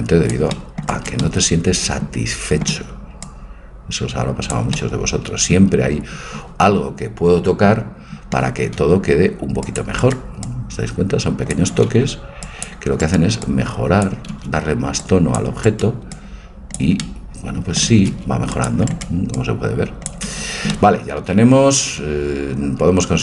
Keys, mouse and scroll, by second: 1.1-3.0 right drag, 1.3-3.0 drag, 3.3-4.8 drag, 5.0 middle click, 8.5 a, 8.8 c, 10.4-12.4 drag, 11.7 a, 12.0 c, 13.4-15.3 drag, 14.2 a, 14.4 c, 16.1 click, 17.1-18.8 middle drag, 17.9 a, 18.1 c, 19.4-20.7 drag, 20.3 a, 20.7-22.4 middle drag.